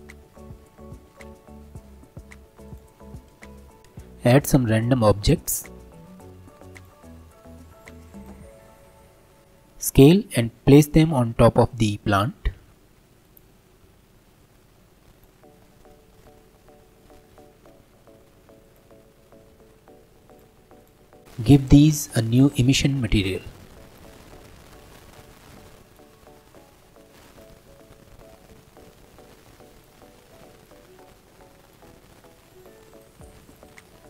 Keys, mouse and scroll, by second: 1.0 shift+d, 3.0 middle click, 3.8-6.0 shift+middle drag, 6.0 shift+a, 9.4 ctrl+z, 12.7 s, 13.8 g, 15.4 scroll up 3, 15.6-17.3 shift+middle drag, 17.3 s, 19.5 g, 20.8-21.2 right drag, 22.3-26.0 drag, 28.5-30.7 drag, 31.6 click, 32.6 click, 32.9 click, 33.5 click, 33.8 scroll down 3.